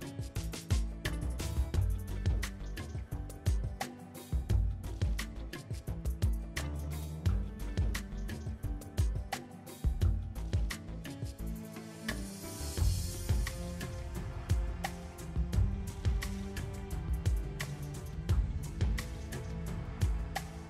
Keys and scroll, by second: 6.0 Tab.